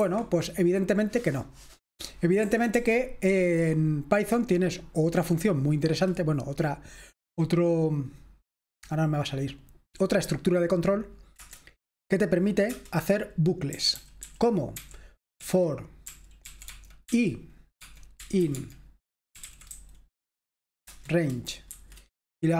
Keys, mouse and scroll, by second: 0.0 Escape, 2.4 typing, 11.4 Return, 12.8 Return, 13.4-22.5 typing.